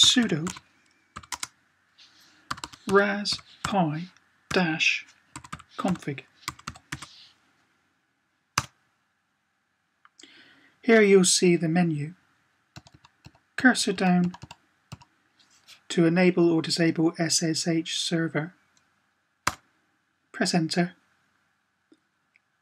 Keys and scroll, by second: 0.0-1.0 typing, 2.4-4.2 typing, 5.3-6.7 typing, 12.7 Down, 12.8 Down, 13.0 Down, 13.3 Down, 13.4-14.7 typing, 14.0 Down.